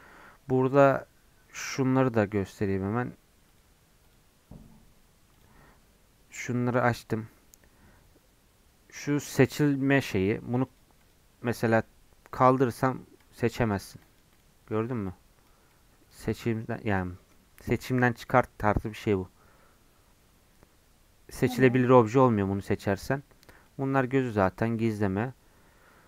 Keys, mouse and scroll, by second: 14.3 click, 15.0 click, 16.4 middle click, 16.9-18.1 drag, 18.1-21.7 middle drag, 22.7-26.0 drag.